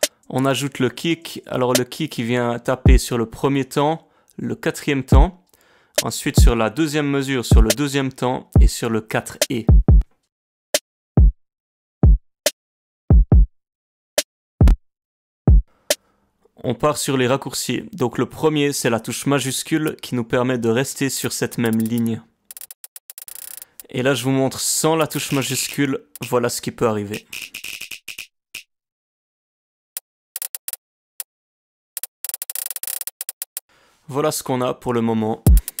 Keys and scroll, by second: 35.4 space.